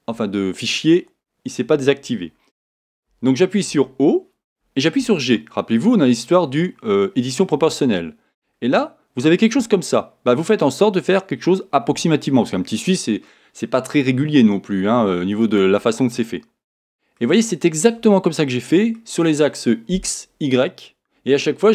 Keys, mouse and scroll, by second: 0.0-15.6 drag, 3.1 o, 5.1 g, 16.2-21.7 middle drag, 17.5-18.1 scroll down 2.